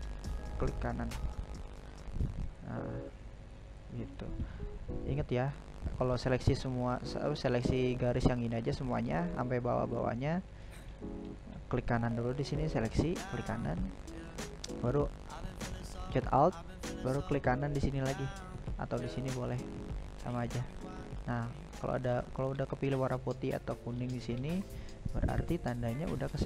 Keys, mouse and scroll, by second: 2.1-3.1 right drag, 3.1-8.6 middle drag, 8.6 right click, 9.6 right click, 10.2-13.2 right drag, 14.3 alt+right click, 15.3-16.6 alt+right drag, 17.3-23.9 middle drag, 23.9-24.4 scroll down 2, 24.4-26.4 shift+middle drag.